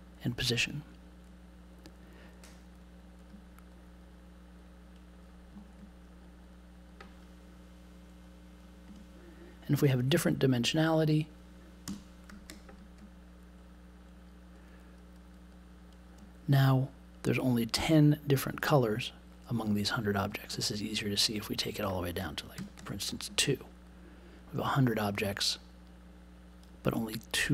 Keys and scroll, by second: 8.8 BackSpace, 9.8 super+z, 11.8 BackSpace, 22.5 2.